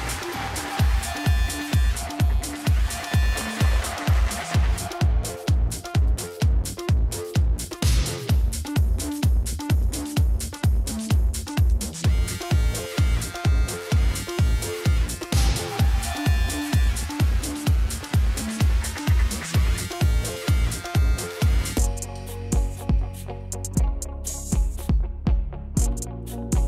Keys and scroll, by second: 9.3 Down, 12.1 Up, 13.2 Up, 18.8 ctrl+v, 20.3 z, 24.8 ctrl+v.